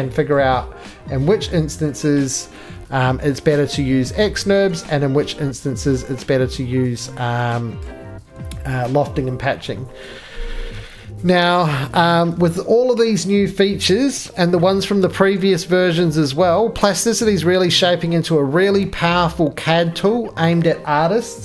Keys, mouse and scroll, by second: 5.9 middle click, 6.1 shift+middle click, 7.8 right click, 9.6 middle click.